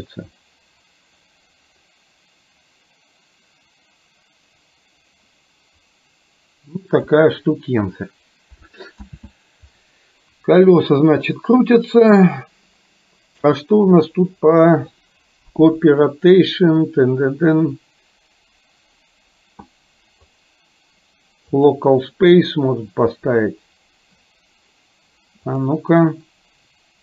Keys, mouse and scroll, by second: 9.1 ctrl+z, 11.7 click, 14.1 click, 20.4-21.8 drag, 25.4 click.